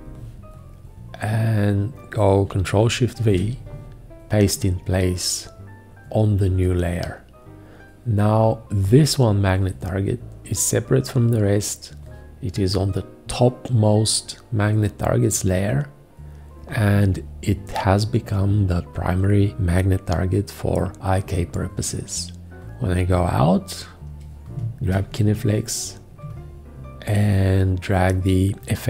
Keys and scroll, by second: 3.2 ctrl+shift+v, 24.9 g.